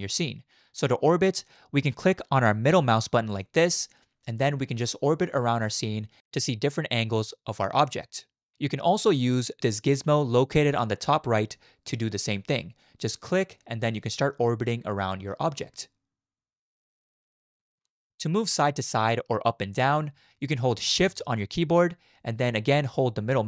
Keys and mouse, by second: 3.5-8.5 middle drag, 13.1 click, 13.3 click, 14.2-15.2 middle drag, 15.2 click, 16.0-18.1 middle drag.